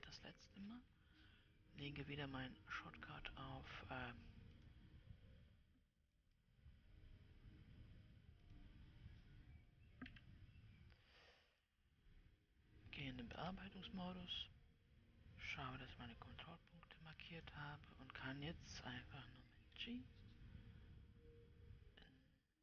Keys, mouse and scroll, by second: 0.4 scroll down 3, 1.1-4.2 scroll down 3, 5.1-6.7 drag, 6.7-12.2 right drag, 12.2-13.8 scroll up 5, 13.8 Tab, 16.2 click, 20.2 g.